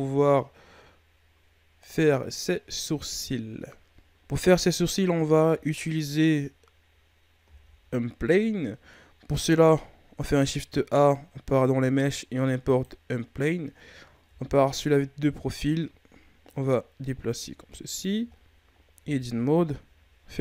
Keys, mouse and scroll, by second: 4.1-7.3 scroll up 2, 7.4 shift+a, 14.2 KP_3, 16.4-18.3 drag, 18.3-18.8 ctrl+scroll down 2, 18.8 scroll up 1, 18.9 Tab.